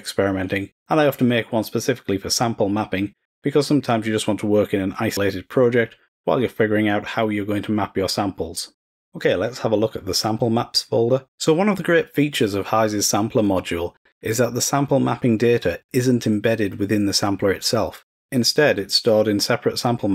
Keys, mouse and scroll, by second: 10.6 click, 10.8 click.